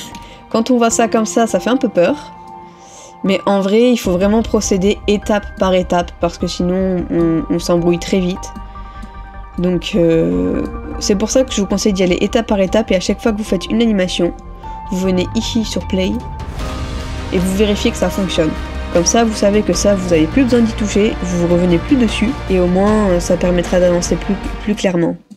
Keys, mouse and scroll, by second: 0.6 middle click, 0.6 ctrl++, 1.1 ctrl++, 3.7 middle click, 12.0 ctrl+-, 23.1 ctrl+-, 23.4 ctrl+-, 24.8 middle click.